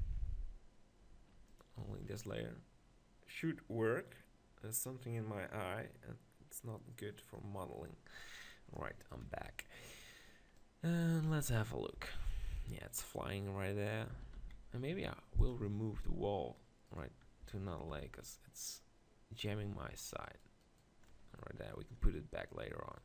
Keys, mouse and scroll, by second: 10.6-11.7 drag, 12.0 z, 14.1 s, 15.5-17.4 drag, 16.9-18.9 right drag, 17.9 m, 18.5 click, 20.3-22.5 right drag, 21.1-23.0 drag.